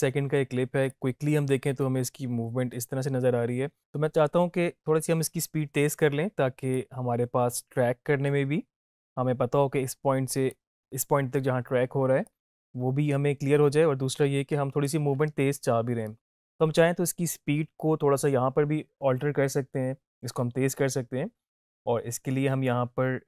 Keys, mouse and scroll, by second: 0.9-3.7 drag, 6.7-10.7 drag.